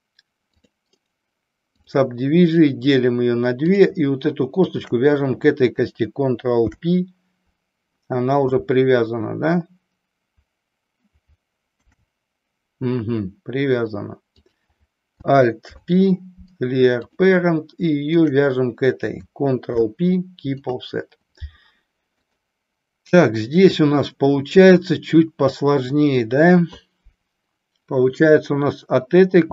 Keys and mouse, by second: 1.2 right click, 4.7 shift+click, 6.6 ctrl+p, 11.7 ctrl+p, 15.6 alt+p, 18.1 shift+click, 19.6 ctrl+p.